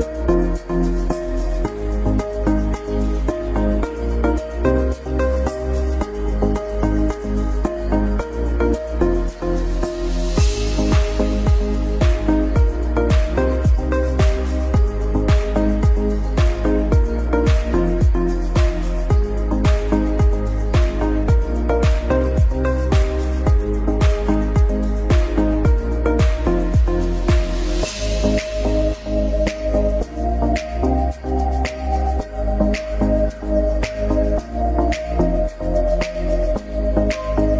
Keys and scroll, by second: 0.0 Escape, 1.7 c, 1.8 e, 4.3 c, 4.4 e, 5.8 e, 7.3 e, 8.8 e, 10.3 c, 10.5 e, 11.8 e, 13.3 e, 13.6 Escape, 17.2 e, 17.7 Escape, 19.5 e, 19.9 Escape, 20.0 F2, 24.9 ctrl+r, 26.1 ctrl+r, 26.8 ctrl+r, 28.1 ctrl+r, 29.2 ctrl+r, 29.8 ctrl+r, 30.5 ctrl+r, 31.0 F3, 35.9 ctrl+r.